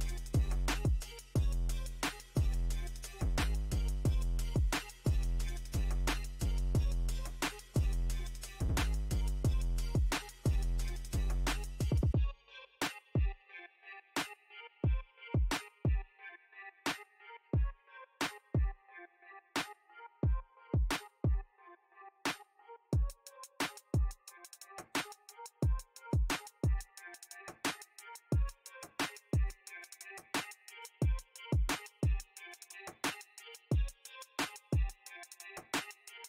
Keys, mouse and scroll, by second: 1.0 click, 1.4 middle click, 2.3-3.4 drag, 3.4 middle click, 3.9-6.4 drag, 6.4 middle click, 6.9 click, 7.7 middle click, 8.5-10.4 drag, 10.4 middle click, 11.1 click, 11.8 middle click, 13.1 middle click, 13.6-15.4 drag, 15.4 middle click, 15.9 click, 16.3 middle click, 17.0 click, 17.7 middle click, 18.3 click, 19.2 middle click, 19.8 space, 20.4 f, 21.1-23.6 drag, 23.6 ctrl+r, 24.0 middle click, 24.4-25.8 drag, 25.8 middle click, 26.7 click, 27.6 middle click, 28.1 click, 28.5-31.7 middle drag, 31.7 f, 34.2 m, 34.6-36.2 drag.